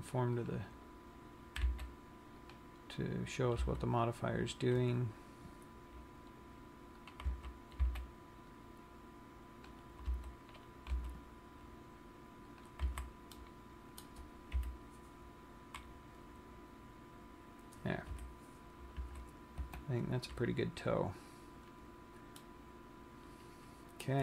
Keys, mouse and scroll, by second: 0.1 c, 1.2 right click, 2.2 c, 3.9 g, 7.6 click, 7.6 a, 8.2 c, 10.6 g, 13.0 click, 13.4 a, 13.6 middle click, 14.9 KP_1, 18.2 KP_3, 19.4 z, 19.9 Tab, 20.5 scroll down 1, 21.9-22.5 scroll up 3, 22.7 middle click.